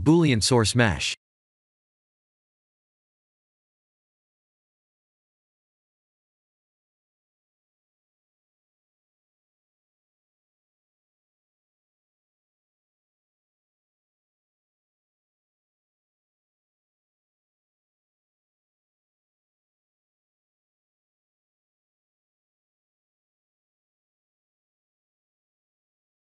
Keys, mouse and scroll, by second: 0.2 click, 0.5 shift+a, 3.9 ctrl+3, 5.1 Tab, 6.1 ctrl+r, 10.6 ctrl+r, 12.6 click, 13.3 ctrl+r, 16.0 click, 16.5 Tab, 17.3 middle click, 18.7 KP_1, 20.5 s, 20.7 x, 22.0 click, 22.3 s, 22.6 z, 24.3 click, 24.9 click, 26.1 shift+click.